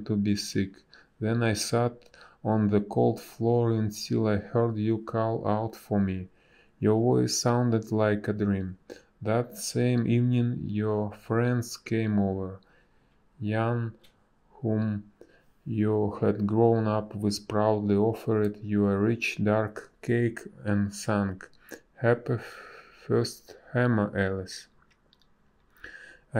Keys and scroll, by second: 6.9 space, 7.8 space, 9.1 space, 19.9 space, 21.1 space, 23.1 a.